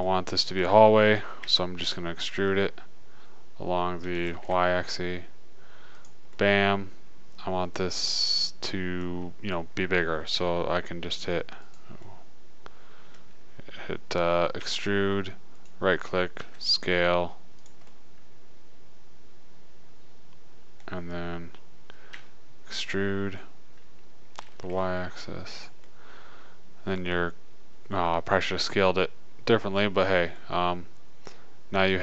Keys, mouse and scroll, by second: 1.8 e, 6.6-8.6 middle drag, 11.0 s, 12.5-14.1 drag, 15.0 e, 16.8 s, 18.0-19.1 drag, 21.4-23.2 middle drag, 22.5 e, 26.3-29.3 middle drag, 30.1-32.0 middle drag.